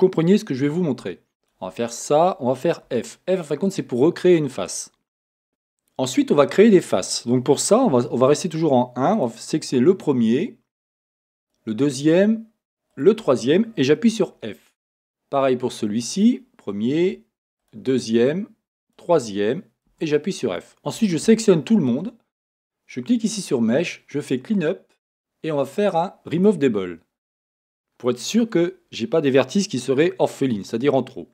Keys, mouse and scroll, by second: 1.4 shift+click, 3.0 f, 5.5 a, 7.9 1, 9.2 click, 11.4 shift+click, 12.9 shift+click, 14.1 f, 16.1 click, 17.6 shift+click, 18.8 shift+click, 19.9 f, 21.0 a, 23.0-27.8 drag, 27.8-31.3 middle drag.